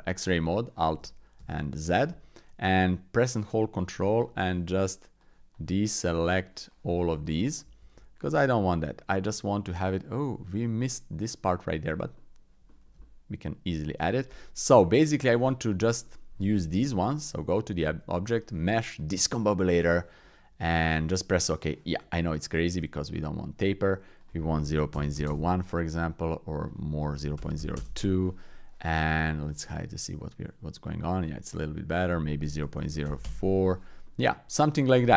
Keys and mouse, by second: 1.0 alt+z, 1.4 alt+z, 3.9 ctrl+click, 5.2 ctrl+click, 6.0 ctrl+click, 6.7 ctrl+click, 7.8 alt+z, 8.2-10.2 middle drag, 10.9 middle click, 11.5 middle click, 12.1 middle click, 12.7 shift+middle click, 13.0 middle click, 13.9 middle click, 14.3 middle click, 16.0 click, 16.7 Tab, 17.9 shift+a, 22.7 click, 24.3 click, 26.6-27.8 drag, 29.4 click, 29.7-30.9 middle drag, 32.0-33.3 drag, 34.0 middle click.